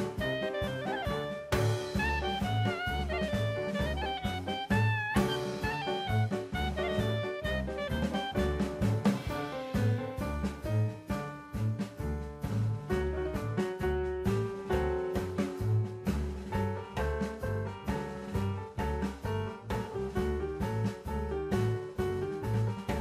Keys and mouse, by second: 0.0 KP_9, 0.2 KP_0, 0.4 KP_Enter, 1.4-1.9 drag, 2.2-2.7 middle drag, 3.2 s, 4.1 click, 4.3 middle click, 5.1 KP_1, 6.0-8.2 drag, 8.8 s, 9.5 click, 10.1 e, 11.8 click, 13.2 Tab, 15.0 click, 17.1 right click, 18.4 click, 20.8 click, 22.2 Tab.